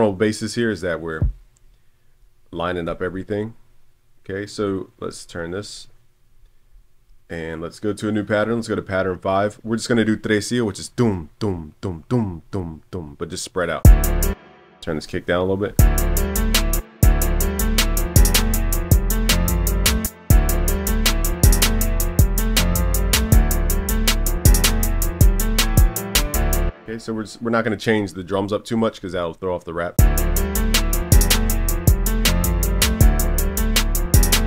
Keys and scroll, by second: 2.9 super+l, 11.0 super+s, 29.3 super+s, 31.4 super+s.